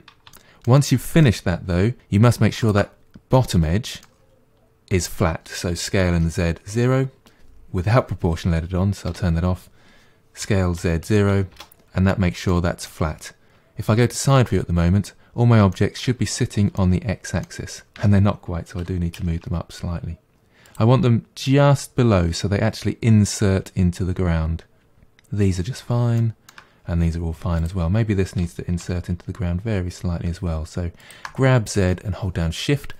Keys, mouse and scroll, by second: 0.3-2.0 shift+middle drag, 2.0 2, 2.6 alt+click, 3.4-5.8 middle drag, 5.8 s, 9.1 o, 10.4 s, 12.5-13.9 middle drag, 13.9 KP_1, 14.8-15.7 scroll down 5, 15.7 shift+middle click, 16.2-16.8 scroll up 1, 16.8-18.0 shift+middle drag, 18.0 Tab, 18.8 g, 26.2-27.6 shift+middle drag, 27.6 click, 28.4 g.